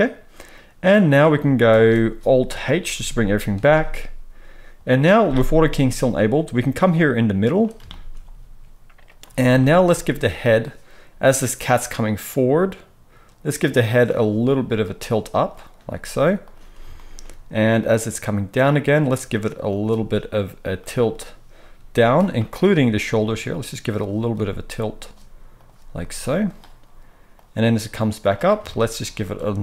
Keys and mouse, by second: 1.6 space, 2.9 alt+h, 9.1-11.2 middle drag, 11.2-15.1 drag, 14.5 r, 15.1 middle click, 15.4 click, 15.4-17.7 middle drag, 15.7 r, 17.7-19.7 drag, 19.7-27.3 middle drag, 23.1 r, 24.3 r, 25.9 r, 27.3-29.5 drag, 29.5-29.6 middle drag.